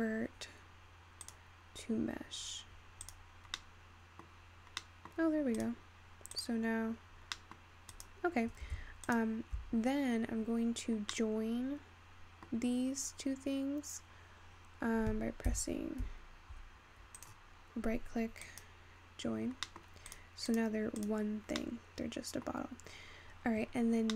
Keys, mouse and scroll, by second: 2.6-3.3 scroll down 2, 3.3 click, 4.1-5.7 middle drag, 5.7-7.3 drag, 7.3-9.0 scroll down 4, 9.2 shift+click, 11.2-15.1 middle drag, 16.3 j, 17.3-19.8 right drag, 19.8-20.2 middle drag, 20.6 click, 21.5 click, 22.1-24.1 middle drag.